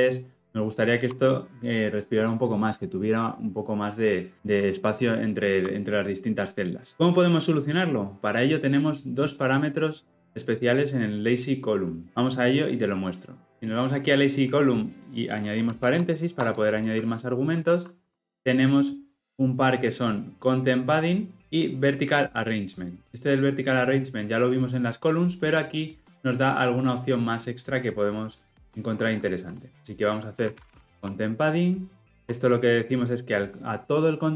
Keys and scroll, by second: 17.7 ctrl+p, 32.2 Return.